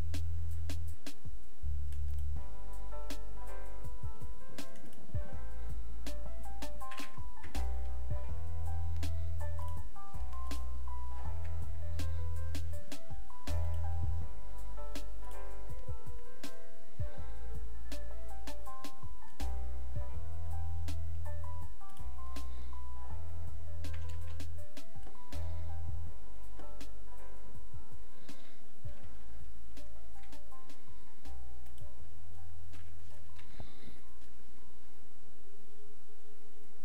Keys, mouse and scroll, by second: 9.6 click.